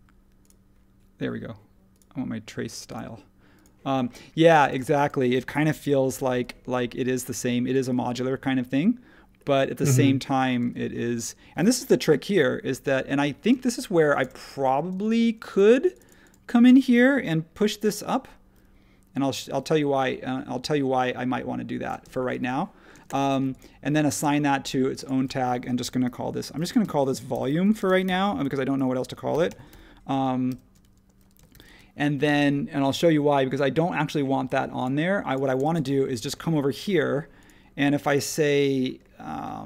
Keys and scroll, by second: 5.7 l, 8.0 Escape, 10.6 space, 12.0 |, 13.5 space, 14.9 space, 17.7 p, 22.0 space, 22.9 space, 26.2-27.9 typing, 29.3 shift+o, 30.5 shift+m, 31.5 shift+e, 31.6 Return.